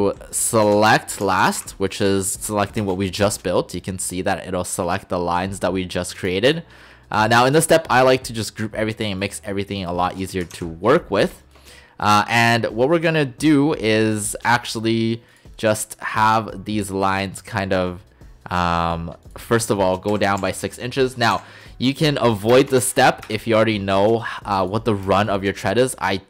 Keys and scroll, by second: 0.7-1.6 typing, 2.8 Return, 10.6 ctrl+shift+g, 20.4-21.4 typing, 22.6 BackSpace, 22.8 shift+', 23.3 Return.